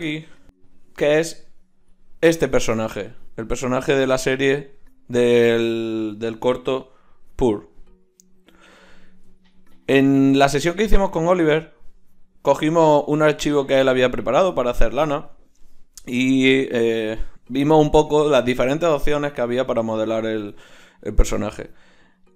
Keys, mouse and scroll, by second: 3.7-6.5 drag, 7.3-22.3 middle drag.